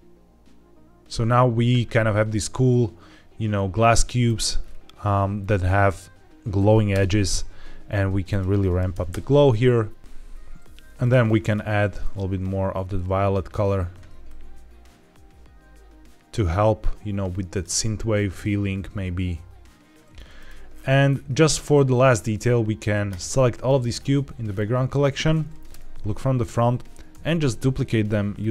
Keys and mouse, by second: 3.8-4.1 middle drag, 6.8 KP_0, 8.2 click, 10.0 z, 10.9 click, 20.2 click, 25.6 KP_1, 27.0 alt+d, 28.3 click.